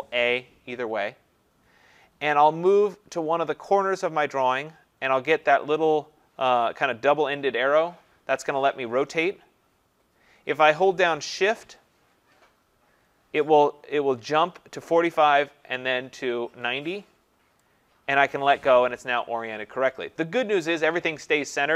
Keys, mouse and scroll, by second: 4.5 click, 17.6 shift+click.